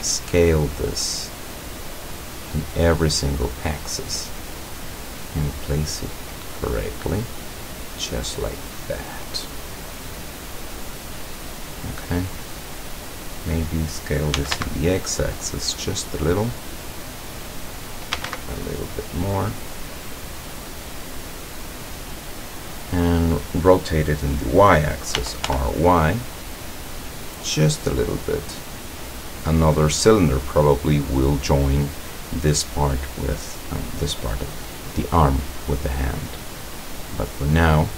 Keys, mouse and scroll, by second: 0.0 s, 1.7-3.7 drag, 4.3-5.8 drag, 6.6-7.8 drag, 7.9-10.8 middle drag, 10.9 middle click, 11.5-12.5 middle drag, 14.4 s, 14.6 x, 15.8 click, 16.5-17.7 drag, 18.2 s, 18.3 x, 19.1 click, 19.5-23.0 middle drag, 25.2 r, 25.5 y, 27.3 click, 28.6 click, 29.8-31.5 drag, 36.2 scroll up 1, 36.7 scroll down 1, 37.8-37.9 middle drag.